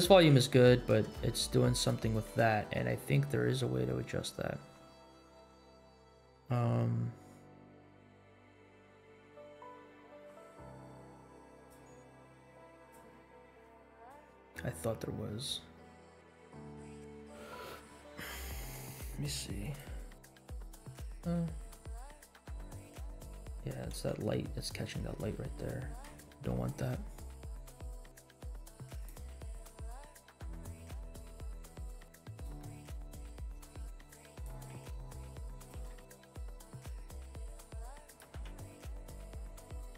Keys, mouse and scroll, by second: 3.8-4.3 scroll down 3, 11.8 click, 12.8 click, 13.9 drag, 18.7 click, 21.2-21.7 scroll down 3, 22.0 scroll up 2, 22.6 space, 23.9 space, 24.8 scroll up 1, 25.3 shift+middle drag, 25.8 scroll up 1, 26.1 shift+middle drag, 27.3 scroll up 1, 27.7 middle click, 28.9-29.3 drag, 29.7-30.3 middle drag, 30.5 scroll down 2, 31.1 g, 32.6 middle click, 33.0 g, 34.7 r, 35.7 g, 38.2 g.